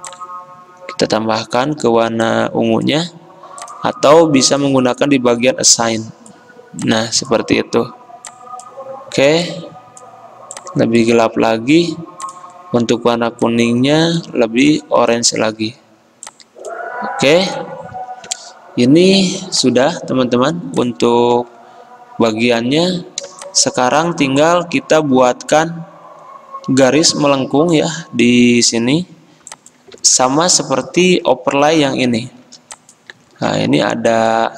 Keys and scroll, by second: 30.0 ctrl+z, 33.6 ctrl+z.